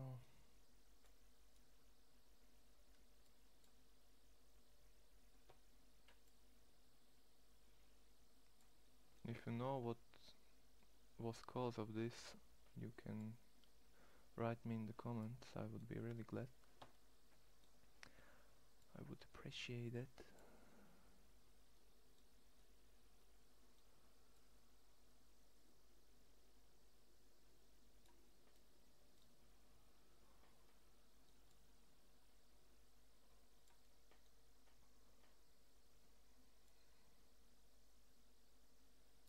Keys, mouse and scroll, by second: 1.5-3.6 middle drag, 3.6 click, 5.6-8.6 middle drag, 9.2 ctrl+z, 12.6-15.1 middle drag, 15.2 middle click, 17.3-22.5 middle drag, 22.5 click, 23.2 click, 23.6 middle click, 24.9-25.6 drag, 28.2 click, 28.3-29.8 middle drag, 33.6 middle click, 34.2 middle click.